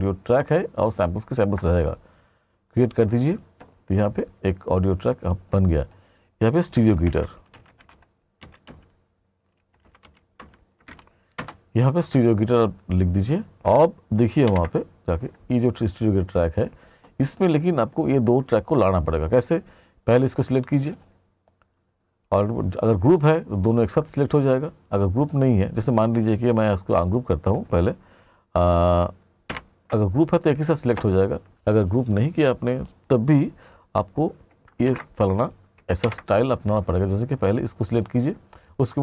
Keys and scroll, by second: 7.1-8.5 typing, 11.6 Return, 14.5 ctrl+=, 30.1 ctrl+=, 34.9 ctrl+shift+g, 36.1 ctrl+=.